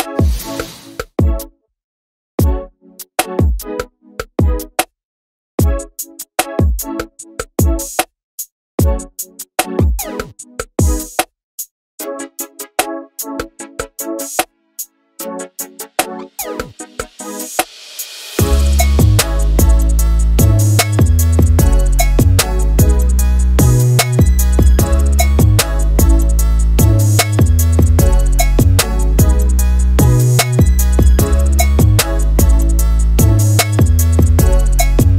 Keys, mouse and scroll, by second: 0.3 click, 1.5 click, 2.6 middle click, 3.5 right click, 4.2 ctrl+z, 4.4 a, 4.5 right click, 5.4 shift+r, 5.7 Tab, 5.9 alt+z, 6.3 Tab, 6.4-6.8 scroll up 1, 6.8 3, 7.0 shift+click, 7.3 middle click, 7.5 right click, 8.7 middle click, 9.5 2, 9.6 click, 10.0 scroll up 1, 10.2 shift+click, 10.9 KP_1, 11.1 scroll up 1, 11.7 ctrl+b, 12.7 middle click, 13.2 3, 13.3 shift+click, 13.8 middle click, 14.8-15.9 ctrl+z, 16.2 click, 16.5 middle click, 16.9 3, 17.0 shift+click, 17.5 middle click, 18.0 i, 18.5 ctrl+z, 18.6 shift+middle click, 18.7 scroll up 1, 18.8 middle click, 19.3 i, 20.0 click, 20.4 middle click, 21.2 e, 21.9 e, 22.2 s, 23.0-23.3 scroll down 2, 23.1 middle click, 23.3 shift+middle click, 23.5 scroll up 1, 23.8 e, 24.8 scroll down 3, 24.9 Tab, 25.0 alt+a, 25.1 click, 25.6 ctrl+2, 25.8 shift+middle click, 25.9 scroll up 2, 26.0 middle click, 26.1 click, 26.2 right click, 26.5 alt+a, 26.6 middle click, 26.7 click, 26.8 scroll down 1, 26.9 scroll up 1, 27.1 Tab, 27.4 click, 28.0 1, 28.4 shift+click, 28.8 shift+click, 29.1 ctrl+z, 29.5 middle click, 29.7 click, 30.2 KP_1, 30.5 shift+middle click, 30.6-30.9 scroll up 2, 30.9 click, 31.6 scroll up 2, 31.7 shift+middle click, 31.9 click, 32.3 alt+z, 32.6 alt+z, 32.7 middle click, 32.8 scroll down 1, 32.9-34.0 middle drag, 34.0-34.8 scroll down 1.